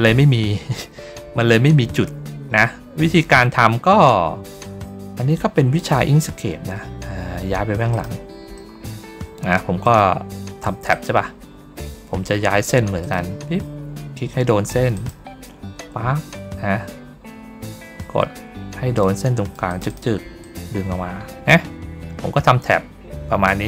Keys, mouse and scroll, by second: 0.6 ctrl+middle click, 0.6-1.0 ctrl+scroll down 1, 2.1 ctrl+middle click, 2.1-2.6 ctrl+scroll up 1, 2.6 ctrl+scroll down 1, 4.5-5.7 drag, 5.9 ctrl+middle click, 5.9 ctrl+scroll up 1, 7.8 click, 8.4 middle click, 9.7 click, 10.8 click, 12.9 click, 14.8 ctrl+click, 18.9 click, 19.6 click, 19.8 click, 20.3-23.6 drag.